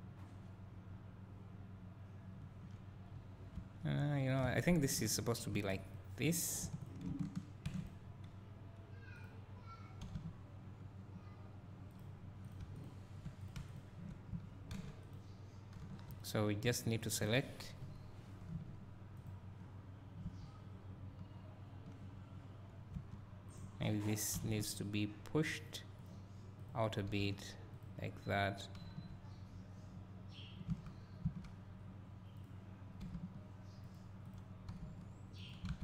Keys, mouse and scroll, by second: 3.1-3.6 scroll up 2, 3.6 1, 4.3 click, 4.7 shift+click, 6.0 alt+m, 6.5 click, 6.8 shift+click, 7.9 alt+m, 9.2 click, 10.1 g, 12.0 click, 12.8 shift+click, 13.5 click, 13.8 shift+click, 15.8 3, 16.2 click, 17.1 shift+click, 19.2 z, 19.3 click, 23.0 1, 23.6 click, 24.4 g, 26.0 click, 27.2 g, 28.4 click, 32.4 click, 33.1 g, 33.9 click, 34.7 g, 35.5 click, 35.7 alt+a.